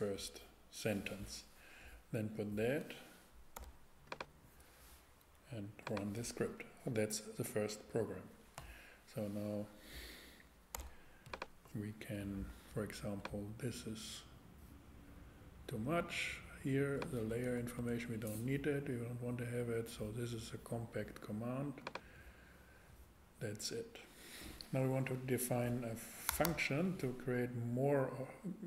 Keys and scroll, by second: 3.6 x, 10.7 x, 17.3 BackSpace, 26.3 Return.